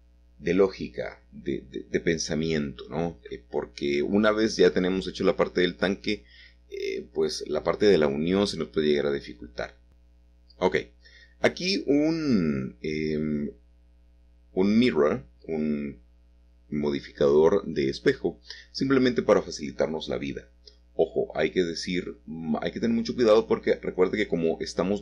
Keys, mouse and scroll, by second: 0.0 Escape, 1.9 middle click, 2.0 click, 3.4 shift+click, 4.3-5.9 middle drag, 5.9 click, 6.2 shift+middle click, 6.9 shift+middle click, 7.2 shift+middle click, 7.9 shift+middle click, 9.9 middle click, 12.6 middle click, 14.6 middle click, 18.1 click, 19.3 middle click, 22.7 click, 23.2 click.